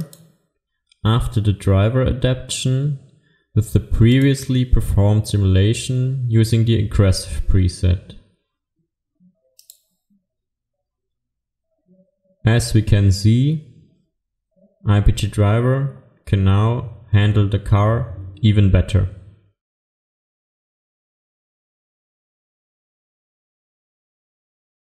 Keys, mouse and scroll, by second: 0.0 click, 4.1 click, 16.8-18.0 scroll up 1.